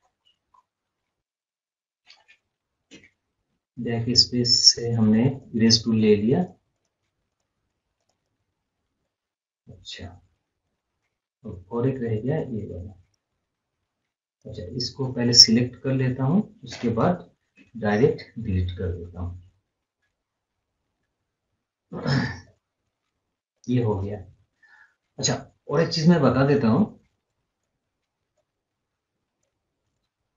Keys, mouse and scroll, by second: 0.4-0.8 scroll up 1, 0.8 scroll down 1, 1.6 scroll up 1, 4.3-4.6 scroll down 1, 5.3 click, 9.0 scroll up 1, 9.4 scroll down 1, 9.7 scroll up 1, 10.3 scroll down 1, 11.0 scroll up 1, 11.0 scroll down 1, 13.7 right click, 14.3 click, 18.2 scroll up 1, 20.2 scroll down 1, 20.3 scroll up 1, 22.4 click, 22.4-23.9 drag, 23.9 scroll up 1, 24.1 scroll down 1, 24.4 scroll up 1, 24.7 scroll down 1, 26.7-29.9 drag, 29.9 scroll up 1, 30.2 scroll down 1.